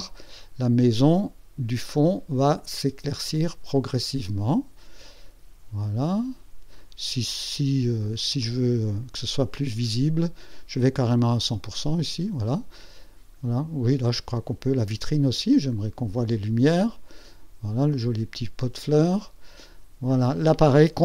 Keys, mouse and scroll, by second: 2.3-6.9 drag, 8.3 click, 9.3-10.7 drag, 11.6 click, 12.7-15.6 drag.